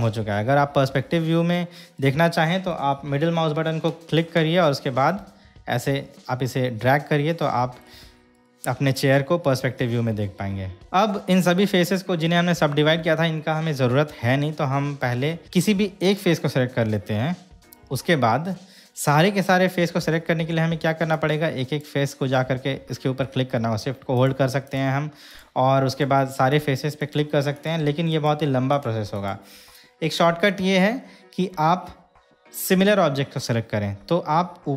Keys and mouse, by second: 2.2 middle click, 4.8-8.0 middle drag, 8.6 shift+middle click, 9.6-10.8 middle drag, 16.2 click, 21.4-22.2 drag, 24.4 shift+click, 24.8 shift+click, 27.7 shift+drag, 28.3 shift+click, 28.9 shift+drag, 29.3 shift+click.